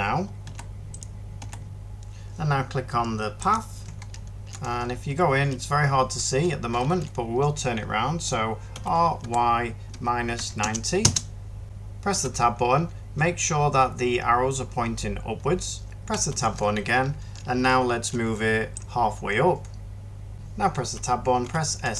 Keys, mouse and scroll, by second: 0.3 h, 1.3 h, 1.7 ctrl+z, 8.6-10.5 typing, 10.9 Return, 12.0 Tab, 12.0 typing, 16.0 Tab, 20.7 Tab, 21.3 s, 21.7 z.